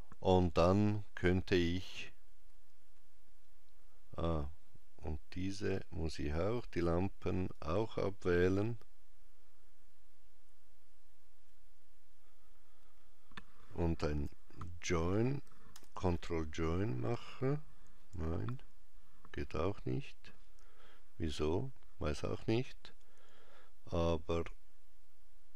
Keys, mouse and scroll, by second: 5.2 shift+click, 6.2 shift+click, 13.9 j, 15.5 ctrl+j, 24.2 click.